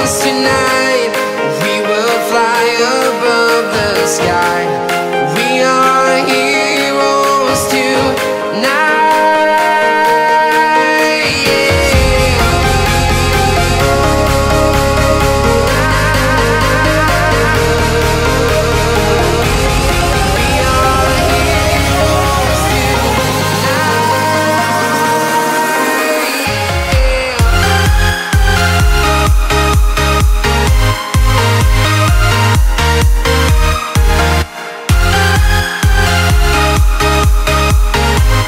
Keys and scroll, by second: 1.7 i, 2.9 v, 5.3 k, 8.3 u, 15.8 super+z, 22.3 v, 23.2 a, 25.7 p, 26.7 a, 30.0 i, 31.6 typing, 33.2 Tab, 37.3 v.